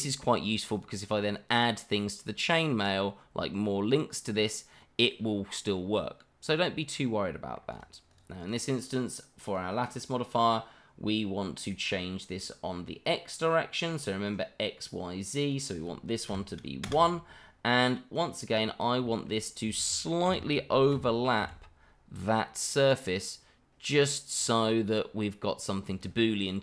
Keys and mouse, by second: 5.7-7.5 middle drag, 7.7 click, 8.1 click, 8.4 click, 9.4 click, 9.9 click, 12.1-12.8 middle drag, 15.5-16.8 drag, 18.1 click, 19.0 shift+middle drag, 20.2 g, 20.9 z, 21.4 x, 25.9 click, 26.4-26.6 middle drag.